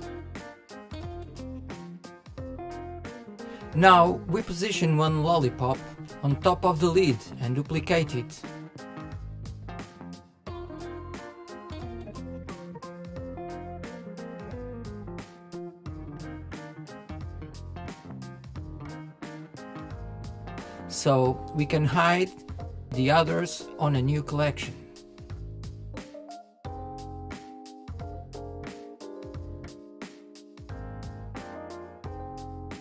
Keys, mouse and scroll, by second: 5.7 middle click, 6.4 scroll down 2, 6.6-7.3 shift+middle drag, 7.3 KP_1, 8.8 click, 9.4 click, 10.6 shift+d, 12.7 KP_3, 14.2-15.4 drag, 17.0-17.6 middle drag, 17.7-19.0 middle drag, 19.0 click, 20.1 m, 24.3-24.7 scroll down 5, 24.7-25.3 scroll up 2, 25.3 click, 25.9 shift+middle click, 26.2 shift+scroll up 1, 26.5 KP_1, 27.0 KP_3, 27.5 scroll up 2, 27.8-28.4 shift+middle drag, 28.4 click, 30.0 KP_1, 30.7 shift+middle click, 31.4 click.